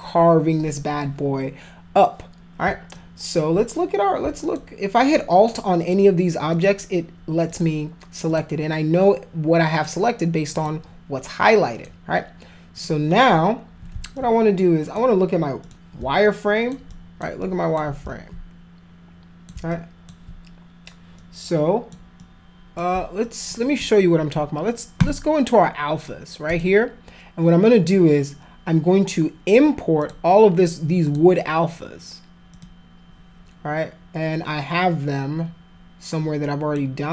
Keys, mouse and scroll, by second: 2.9 alt+click, 4.4 alt+click, 5.8 alt+click, 6.5 alt+click, 7.5 alt+click, 8.3 alt+click, 9.7 alt+click, 10.5 alt+click, 11.7 alt+click, 12.8 alt+click, 14.1 alt+click, 15.6 click, 16.2 alt+click, 16.9 alt+click, 17.4 alt+click, 18.0-19.5 alt+drag, 19.7 alt+click, 21.1 click, 22.1 click, 23.2 alt+click, 24.9 click, 26.4 click, 30.0 click, 31.0 click, 32.5 click, 34.4-36.7 drag.